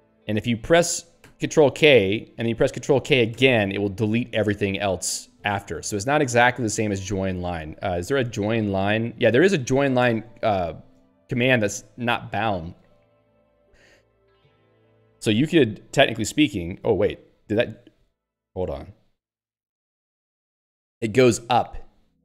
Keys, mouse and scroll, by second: 5.4 ctrl+/, 7.5 alt+x, 7.7-9.0 typing, 10.0 ctrl+g, 11.5 alt+x, 14.1-15.6 typing, 16.7 ctrl+/, 18.1 End, 18.3 alt+x, 18.7 Return, 19.8 ctrl+/, 21.6 End.